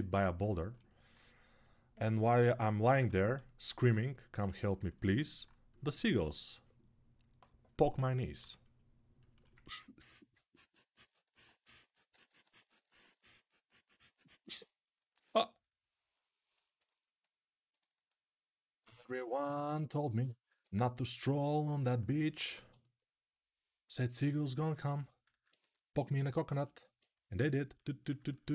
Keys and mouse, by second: 2.0-19.2 alt+drag, 11.5 g, 11.9 ], 12.0 ], 19.2-28.2 ctrl+alt+right drag, 20.4 alt+q, 22.2 1, 25.1 alt+q, 28.2-28.5 alt+drag.